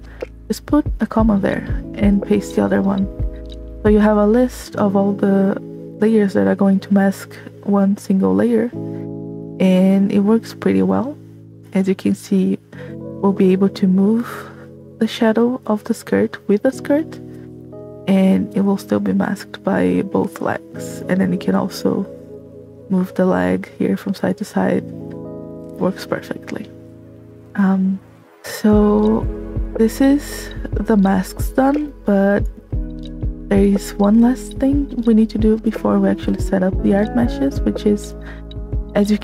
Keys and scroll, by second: 0.9 space, 2.5 v, 28.2 space, 37.9 space.